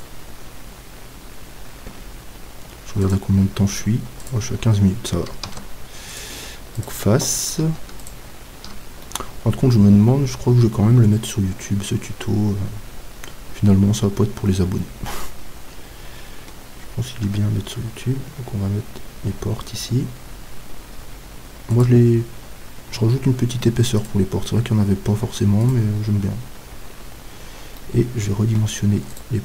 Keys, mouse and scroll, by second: 5.4 ctrl+Tab, 6.8-9.9 right drag, 9.0-11.0 middle drag, 17.2 e, 26.5 middle click, 26.9-27.8 scroll up 1, 27.8 scroll up 1, 28.0-29.1 middle drag, 29.1-29.4 drag, 29.1-29.4 right drag.